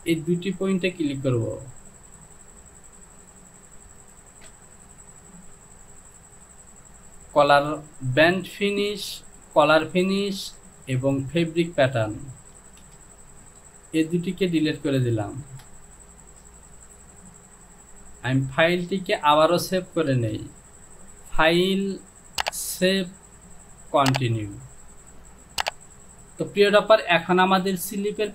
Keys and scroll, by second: 6.0 j, 12.8 shift+z, 13.5 shift+z, 18.5 j.